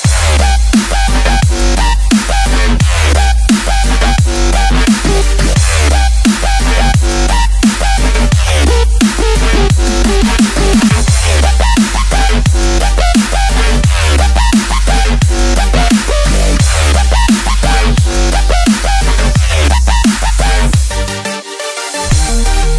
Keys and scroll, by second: 0.3 F7, 4.1 F7, 4.3 v, 5.9 F1, 11.0 ctrl+Tab, 11.4 ctrl+a, 11.9 ctrl+Tab, 12.6 ctrl+v, 13.8 ctrl+t, 19.9-20.8 typing.